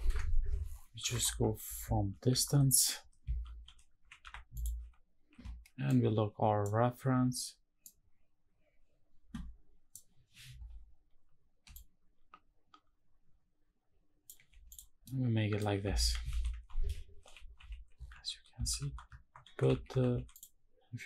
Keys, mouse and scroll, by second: 0.0 s, 0.7 Escape, 1.1 shift+`, 4.5 n, 9.3 Escape, 9.3 s, 9.3 shift+`, 11.4-14.0 shift+drag, 14.4 click, 14.7-15.3 middle drag, 15.7 shift+`.